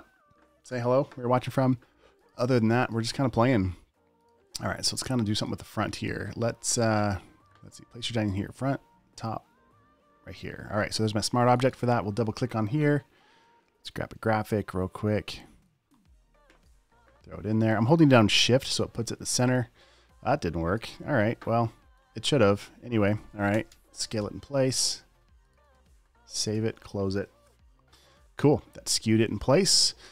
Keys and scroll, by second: 24.0 v, 24.3 super+a, 25.9 super+d, 26.0 v, 26.4 super+s, 26.8 super+w.